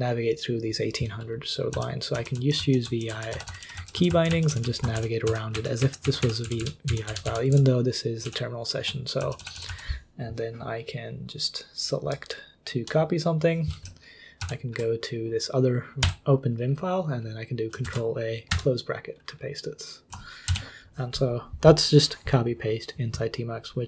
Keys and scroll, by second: 1.5-6.0 typing, 6.2 ctrl+u, 6.4 ctrl+d, 6.6 ctrl+d, 6.9 ctrl+d, 7.1 ctrl+d, 7.2 ctrl+d, 7.7 ctrl+d, 8.2 ctrl+u, 9.2 k, 9.4 k, 9.5 k, 9.7 k, 14.4 ctrl+l, 16.0 i, 17.8 ctrl+a, 18.5 ], 20.5 ctrl+c.